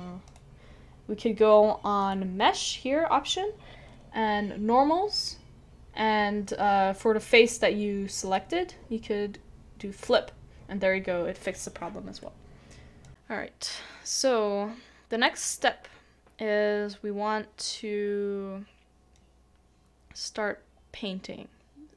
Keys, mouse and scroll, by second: 15.2 shift+middle click.